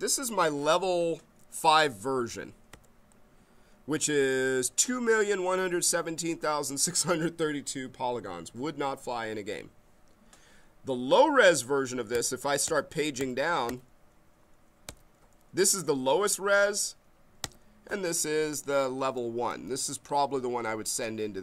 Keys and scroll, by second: 2.7 Page_Up, 12.1 Page_Down, 14.9 Page_Down, 17.4 Page_Up.